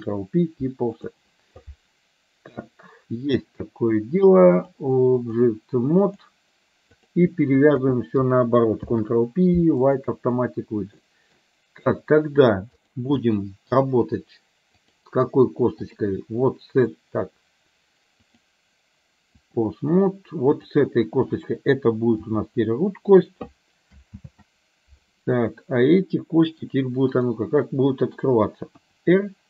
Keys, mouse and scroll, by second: 4.7-6.4 drag, 7.0 click, 7.7 shift+click, 8.8 ctrl+p, 11.1 middle click, 13.4 middle click, 14.9-16.1 drag, 18.5-19.7 drag, 20.6 click, 22.2 g, 24.3 ctrl+z, 25.5-26.7 middle drag, 27.1 click, 27.7 middle click, 28.9 r.